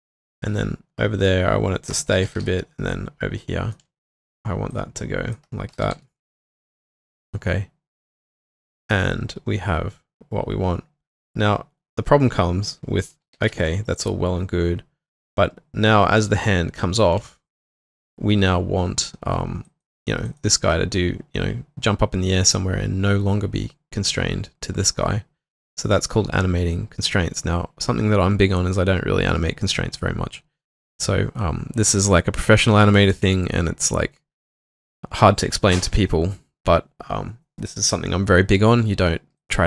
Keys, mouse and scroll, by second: 0.0-0.3 typing, 2.2 typing, 4.0 alt+middle click, 5.5-6.4 typing, 12.5-13.9 typing, 17.4 alt+middle click, 17.7 alt+right click, 18.0 q, 20.3 double click.